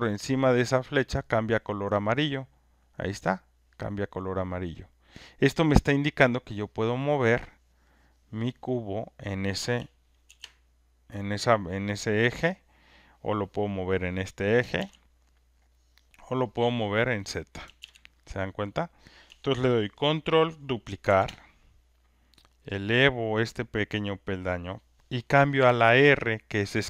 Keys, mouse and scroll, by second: 0.0 alt+click, 8.7 click, 10.2 ctrl+z, 14.1 click, 14.7 ctrl+z, 17.3 click, 17.8 ctrl+z, 21.0 ctrl+d, 24.5 click.